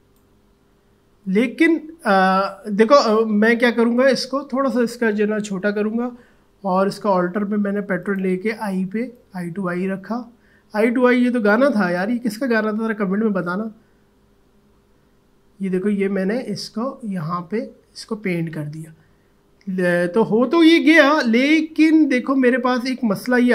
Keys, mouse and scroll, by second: 0.7 ctrl+z, 5.4 typing, 8.1-19.1 alt+drag.